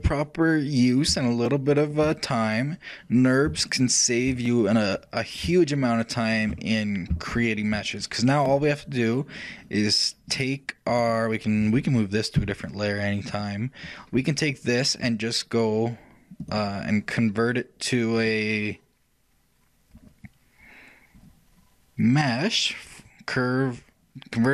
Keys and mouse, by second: 9.2-12.2 shift+drag, 10.4 shift+right click, 16.5-18.3 drag.